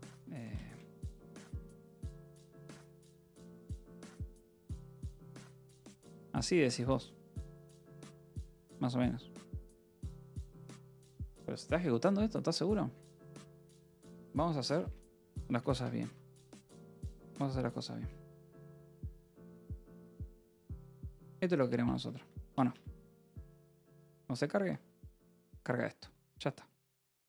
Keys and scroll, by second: 0.3 f, 1.1 {, 1.4 a, 1.9 Return, 2.2 Escape, 2.8 p, 3.2 j, 4.1 j, 5.0 d, 5.1 Escape, 5.9 ctrl+s, 6.2 k, 6.9 k, 7.2 j, 14.4-20.3 typing, 20.6 Escape, 21.4-23.9 typing, 23.8 ctrl+s, 25.1 ctrl+s.